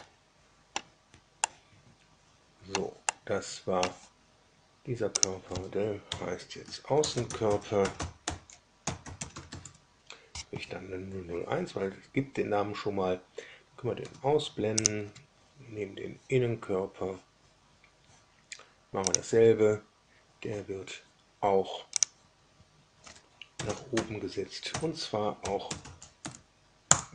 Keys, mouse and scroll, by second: 1.3-2.8 middle drag, 3.0 middle click, 5.1 click, 6.0 F2, 6.7-9.9 typing, 13.9 space, 14.7 click, 19.0 click, 21.9 click, 23.3-26.2 typing, 26.8 Return.